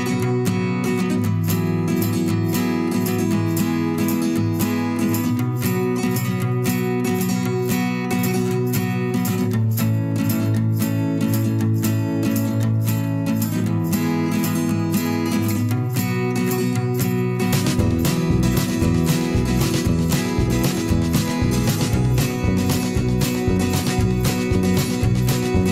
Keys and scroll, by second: 2.0 ctrl+a, 8.7 Return.